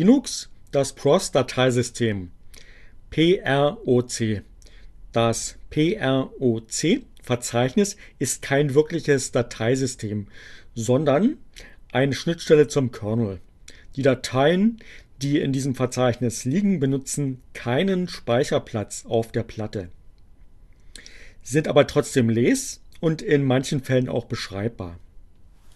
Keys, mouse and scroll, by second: 24.9 click.